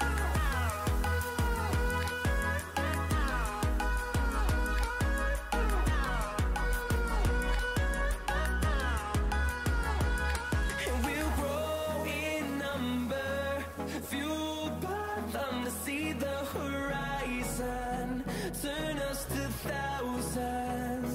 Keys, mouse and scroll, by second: 2.3 shift+right click, 5.5 click, 12.7 click, 16.5 scroll down 1, 17.1 scroll up 1, 18.3 click.